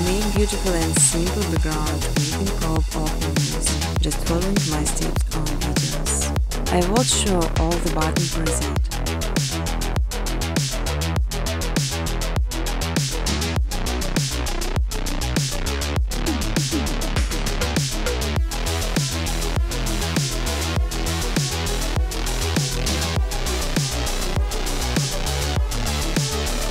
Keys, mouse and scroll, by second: 0.2 click, 0.8 click, 1.2 middle click, 2.7 click, 3.4 click, 5.9 click, 6.7 click, 9.4 click, 14.3-16.5 typing, 16.7 Return, 18.8 click, 18.8 typing, 19.6 click, 20.7 click, 20.7-23.0 typing, 24.5 click, 25.2 ctrl+c, 25.5 ctrl+d, 25.8-26.7 scroll.